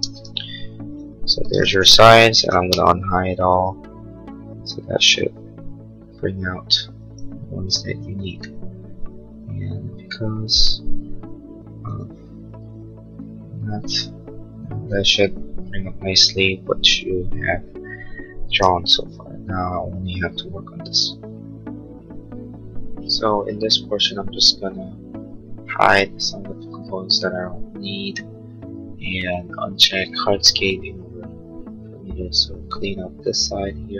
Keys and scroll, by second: 3.0 shift+u.